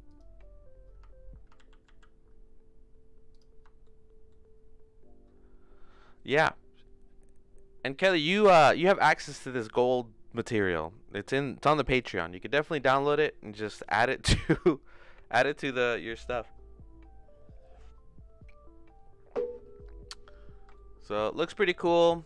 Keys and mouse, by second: 1.6 ctrl+z, 1.9 ctrl+z, 3.3 click, 3.8 shift+middle click, 20.7 shift+middle click, 21.2 middle click, 21.7 click.